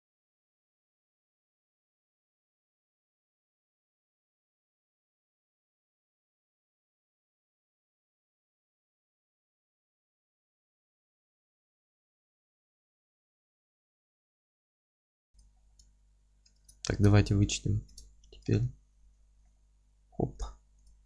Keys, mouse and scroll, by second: 1.0 click, 1.1 alt+middle click, 1.4 g, 1.7 click, 1.8-3.0 alt+middle drag, 2.0 Tab, 2.6 Tab, 3.1 click, 3.3 ctrl+x, 3.5 alt+middle click, 3.7 Tab, 4.2 scroll down 2, 4.3-4.9 scroll up 4, 4.4 Tab, 4.9 click, 5.1 ctrl+x, 5.2 scroll down 1, 5.3 Tab, 5.4-7.4 alt+middle drag, 5.8-6.3 scroll down 4, 6.8 scroll up 2, 7.4-7.8 scroll up 4, 7.8 Tab, 8.5 drag, 8.7 middle click, 9.1 Tab, 9.1 scroll down 2, 9.3 alt+middle click, 9.7 Tab, 10.1 scroll down 2, 10.4 alt+q, 10.6-15.3 alt+middle drag, 10.8 alt+q, 10.8 scroll down 1, 11.3 scroll up 1, 11.4 z, 11.6-11.9 scroll down 1, 12.0 scroll up 1, 12.2 scroll down 1, 12.8 scroll up 1, 13.4 scroll down 2, 13.6 alt+q, 13.8 alt+q, 14.6 alt+h, 14.9 scroll down 2, 15.3 click, 15.5-17.2 middle drag, 17.2 ctrl+click, 17.7 ctrl+KP_Subtract, 18.3 scroll up 1, 18.5-20.4 alt+middle drag, 19.1 scroll down 1, 20.4 click.